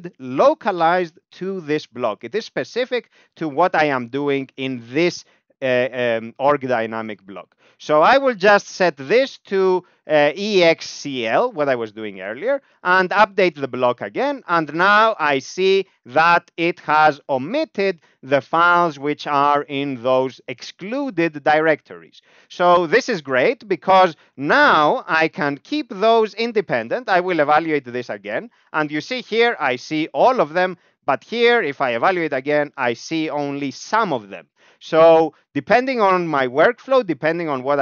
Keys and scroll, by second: 4.5 ctrl+alt+space, 7.8-11.1 typing, 13.5 ctrl+u, 14.5 Down, 14.7 Down, 14.8 Down, 15.0 Down, 15.3 Up, 15.5 Up, 15.7 Up, 15.9 Up, 16.1 Up, 16.4 Down, 22.3 Down, 22.6 Down, 22.8 Down, 22.9 Down, 23.1 Down, 24.2-25.5 Up, 25.6 Up, 25.8 Up, 28.3 ctrl+u, 29.0 Down, 29.2 Down, 29.5 Down, 29.7 Down, 29.8 Down, 30.0 Down, 30.2 Down, 30.4 Down, 30.6 Down, 31.8 ctrl+u, 32.6 Down, 32.7 Down, 33.0 Down.